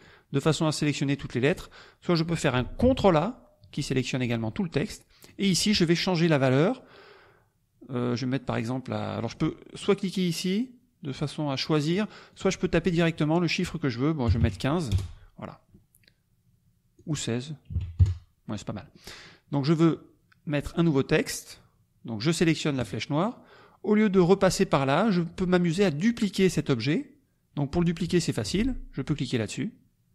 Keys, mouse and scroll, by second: 1.4 click, 2.8 ctrl+a, 5.3 click, 8.5 click, 9.3 click, 9.8 click, 12.4 click, 12.8 click, 14.2 KP_1, 14.4 KP_5, 14.9 Return, 17.0 click, 17.7 KP_1, 17.7 KP_6, 18.0 KP_Enter, 22.8 click.